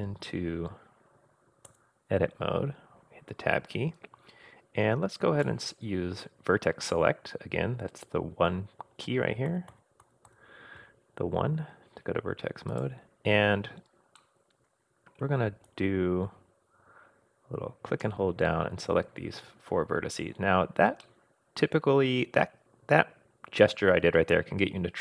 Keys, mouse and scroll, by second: 1.7 Tab, 5.4 click, 9.5 2, 9.7 3, 10.0 2, 10.3 1, 12.7 click, 14.2-15.2 middle drag, 15.7-18.1 drag, 19.5-19.9 scroll up 2, 20.9 scroll down 1, 21.0-25.0 middle drag.